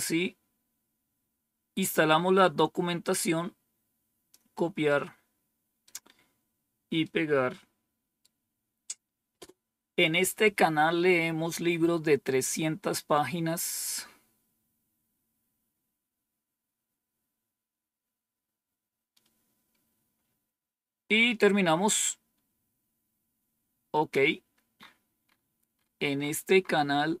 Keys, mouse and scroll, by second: 3.1-4.2 drag, 4.8-5.8 right drag, 6.9-9.0 right drag, 9.2 Return, 13.4-14.2 scroll down 1, 23.2-24.3 scroll down 2, 25.1-27.2 scroll up 2.